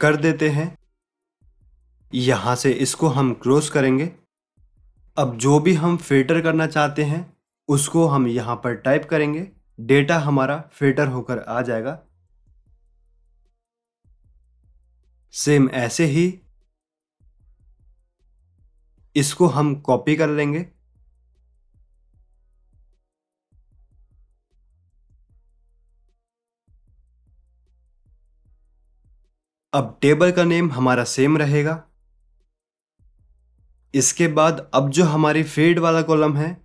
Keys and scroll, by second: 23.4 ctrl+c, 26.8 ctrl+v.